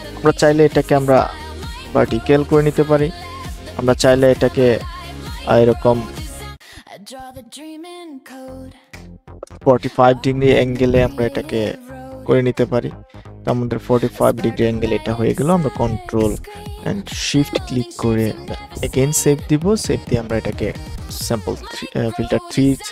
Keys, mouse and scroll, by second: 6.1-7.5 drag, 8.9 Return, 12.9-13.3 alt+scroll up 1, 17.9 ctrl+shift+s, 19.3 click, 20.2 BackSpace, 20.4 KP_3, 21.7 click.